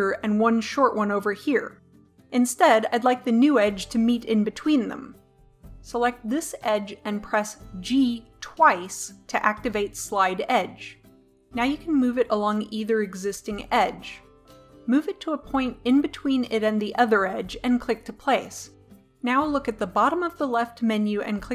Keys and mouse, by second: 2.6 ctrl+z, 6.7-17.2 right drag, 8.6 g.